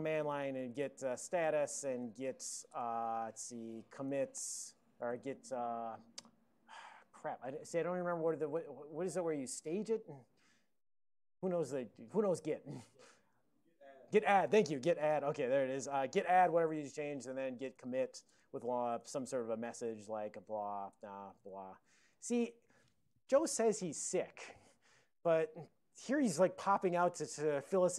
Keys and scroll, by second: 0.0-2.7 typing, 3.8-4.7 typing, 5.1 alt+BackSpace, 15.0-15.9 typing, 17.3 alt+BackSpace, 17.5-23.2 typing.